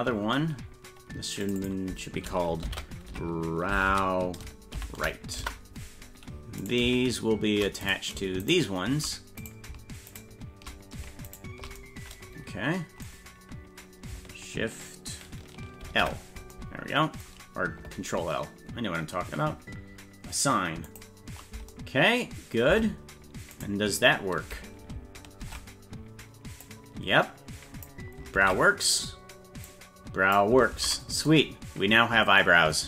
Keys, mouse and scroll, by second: 1.5 click, 1.6-5.9 drag, 6.7 right click, 7.9 right click, 8.4 shift+right click, 9.4 right click, 10.1 shift+right click, 11.3 shift+right click, 15.9 ctrl+l, 20.9 click, 22.7 Tab, 23.6 right click, 25.4 Tab, 26.7-27.9 drag, 28.5 ctrl+z, 29.0 right click, 29.7 click, 30.8 ctrl+z.